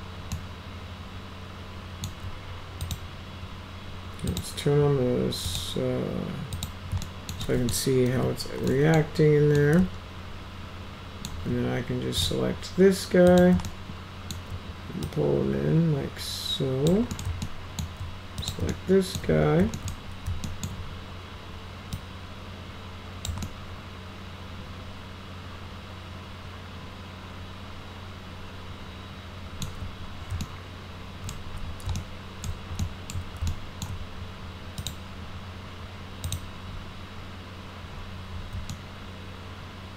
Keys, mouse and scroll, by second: 0.4-2.1 alt+middle drag, 2.8 click, 4.3 click, 5.5 click, 6.5 click, 7.1 alt+middle click, 7.4-7.7 middle drag, 8.1 F3, 8.7 middle click, 9.6-11.3 alt+middle drag, 12.2 click, 13.3 click, 13.7 alt+middle click, 15.1-16.9 drag, 17.1 middle click, 17.5 alt+middle click, 18.4 click, 18.7 alt+middle click, 19.8 alt+middle click, 20.5 alt+middle click, 22.0-23.3 drag, 23.5-29.6 alt+middle drag, 30.4 alt+middle click, 32.0 alt+middle click, 32.8 alt+middle click, 33.5 alt+middle click, 34.8 click, 36.3 click, 38.7-39.9 alt+middle drag.